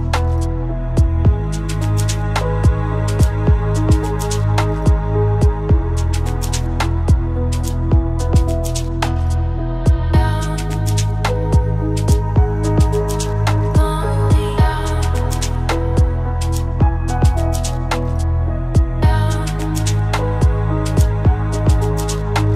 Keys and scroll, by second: 6.6 ctrl+space.